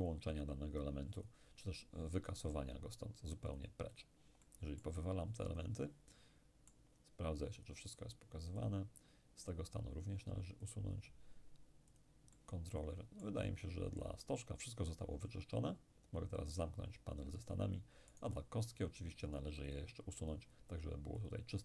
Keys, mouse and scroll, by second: 0.4 click, 3.5 click, 4.4-10.5 middle drag, 10.7 click, 12.0-14.2 drag, 12.3-14.2 middle drag, 16.5 click, 18.2 right click, 19.7-21.6 drag.